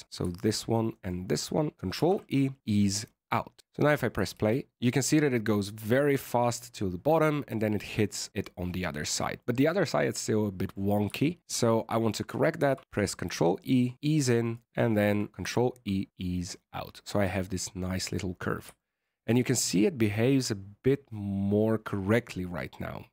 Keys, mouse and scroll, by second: 0.9 shift+right click, 1.9 ctrl+e, 4.3 alt+a, 9.0-10.0 scroll down 5, 9.3 middle click, 10.5 right click, 11.4 shift+right click, 12.5 ctrl+e, 14.4 right click, 14.8 shift+right click, 15.4 ctrl+e, 18.7 shift+middle click.